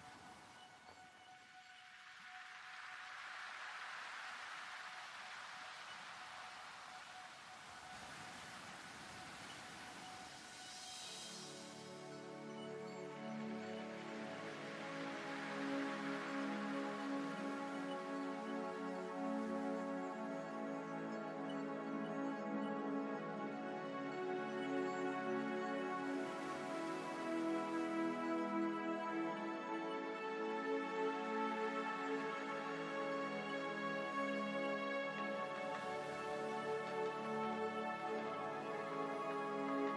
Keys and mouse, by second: 0.9 right click, 1.7 e, 1.8 click, 2.6-4.6 drag, 5.2 ctrl+Tab, 9.5 ctrl+r, 11.5 ctrl+Tab, 13.5 ctrl+Tab, 16.2-20.6 drag, 17.6-21.8 right drag, 22.6-25.3 drag, 25.3-29.9 right drag, 26.2-28.3 drag, 29.9-32.3 middle drag, 32.3 e, 34.4 s.